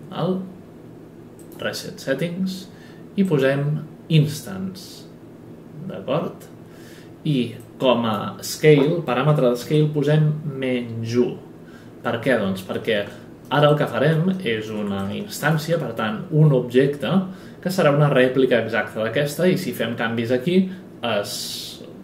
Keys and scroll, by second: 9.3 KP_Subtract.